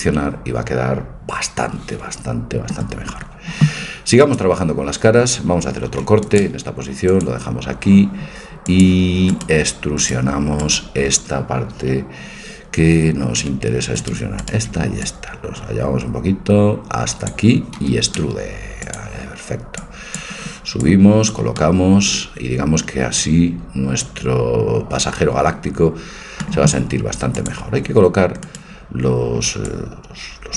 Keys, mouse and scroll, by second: 4.2-6.2 drag, 6.0 ctrl+r, 8.8-10.4 drag, 9.4-12.5 right drag, 14.0-16.3 right drag, 15.0 click, 16.3 click, 17.8 e, 19.7-21.6 drag, 21.6-22.9 middle drag, 27.3-29.2 drag, 28.5-30.4 right drag, 29.7-30.5 drag.